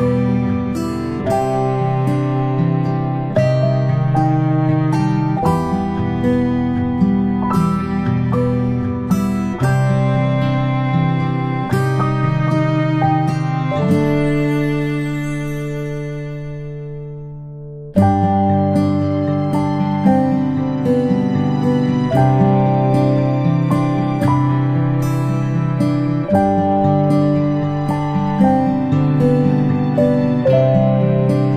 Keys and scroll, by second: 15.7 ctrl+g, 24.9 ctrl+p, 27.7 space.